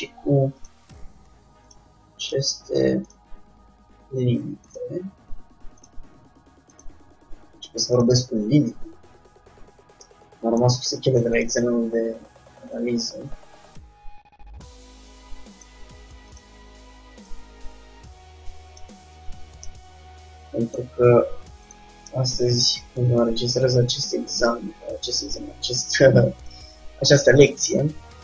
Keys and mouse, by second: 0.7-4.4 drag, 1.0 g, 2.5 g, 4.8-6.6 drag, 5.1 g, 7.0-8.7 drag, 7.1 g, 10.2-12.1 middle drag, 11.6-14.6 drag, 16.4-19.3 drag, 19.3 Tab, 19.9-22.2 middle drag, 22.2 Tab, 22.2 click, 22.4-24.7 middle drag, 25.1-26.1 drag, 26.1 right click, 26.3 click, 27.2-28.2 middle drag.